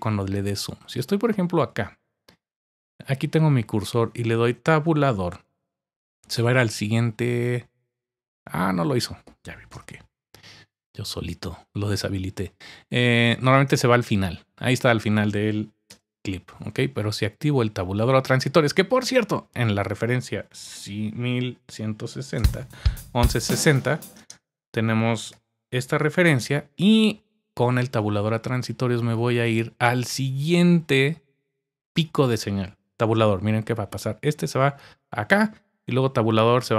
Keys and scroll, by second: 4.7 typing, 6.3 Tab, 9.7 Return, 14.0 Tab, 15.9 Return, 21.1-22.9 typing, 24.2 typing, 25.3 typing, 34.4 Tab, 36.5 Tab.